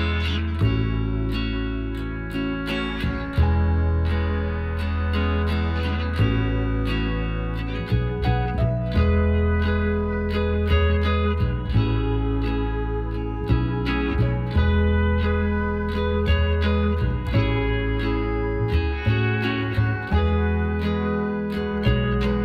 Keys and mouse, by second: 0.4-1.7 middle drag, 1.4 click, 1.4 right click, 1.7 Tab, 5.2-20.8 drag, 21.0-22.4 right drag, 21.9 l.